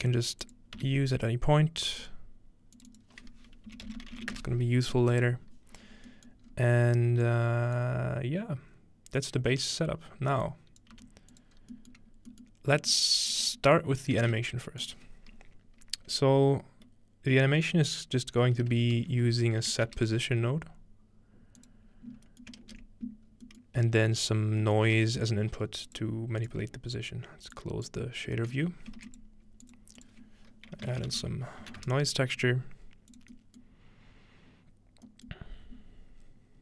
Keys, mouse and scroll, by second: 0.0-2.0 scroll up 2, 0.6-4.7 drag, 0.8 n, 3.7-4.8 typing, 5.4-6.1 scroll down 3, 6.5 scroll up 2, 7.3 click, 7.7 middle click, 10.4 click, 11.0 g, 11.3 click, 11.6 scroll down 1, 11.9-12.3 scroll up 2, 12.0 click, 13.3 scroll up 2, 14.0-15.4 shift+middle drag, 14.0-15.0 scroll up 1, 14.3 shift+a, 14.9-18.5 drag, 21.6 click, 22.1-24.6 scroll up 1, 25.0 shift+a, 25.3 click, 27.6 click, 28.7-30.6 scroll up 1, 29.0 typing, 29.1-31.1 shift+drag, 30.7-32.1 typing, 33.1 click, 33.7-34.4 scroll down 2, 34.4 scroll up 2, 34.5-35.1 scroll down 2.